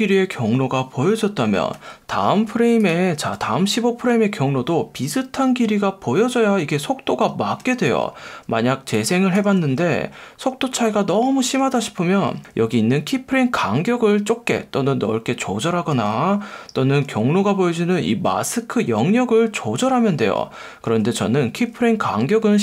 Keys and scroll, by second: 1.7 F1, 3.3 F1, 7.6 F1, 9.5 space, 11.5 space, 12.4 F1, 15.9 F1, 17.0 F1, 20.9 F1, 21.5 F1.